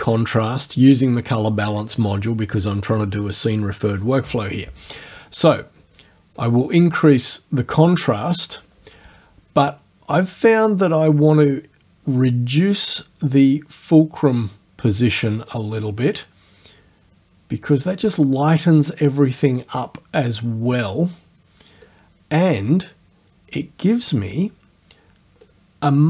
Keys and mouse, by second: 6.4-8.8 drag, 10.7-15.7 drag, 21.9-25.6 drag.